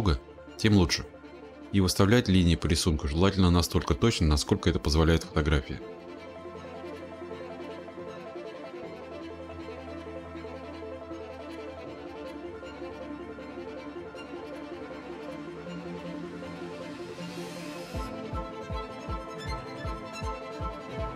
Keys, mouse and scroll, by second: 0.8-3.5 drag, 4.9 click, 5.4-7.7 scroll, 7.7 click, 7.8-10.2 scroll, 11.5 click, 11.8-12.6 scroll, 16.1 click, 17.4 click, 17.7-18.7 scroll, 19.8 click, 20.0-20.8 scroll.